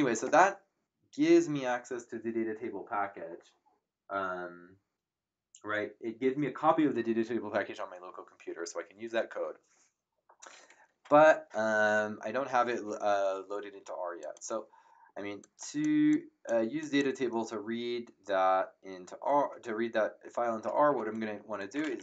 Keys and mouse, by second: 14.2 click, 15.4 click, 21.4-22.0 typing.